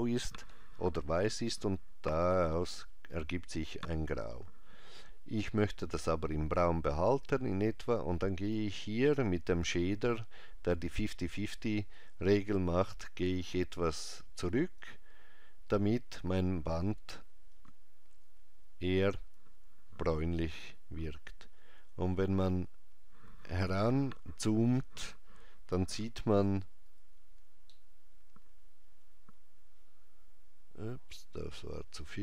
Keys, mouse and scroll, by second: 7.9 click, 12.7 click, 17.6 click, 21.8 scroll up 1, 22.7 scroll down 1, 27.8 ctrl+middle click, 29.2-32.2 ctrl+c, 29.2 click.